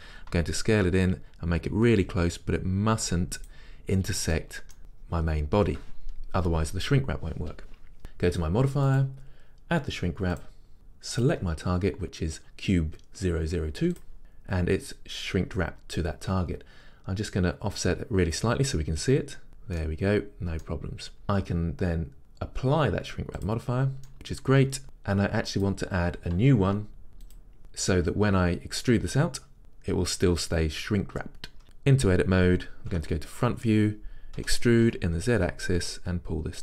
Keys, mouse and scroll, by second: 0.5 s, 3.6 click, 4.4-10.4 middle drag, 4.8-6.5 scroll up 2, 6.5-8.0 scroll up 1, 8.0-10.4 scroll up 1, 10.4-11.5 drag, 17.8-19.8 drag, 19.8-23.5 middle drag, 23.5 click, 24.1-27.4 middle drag, 27.4-36.6 drag, 31.6 Tab, 33.0 KP_1, 34.5 e.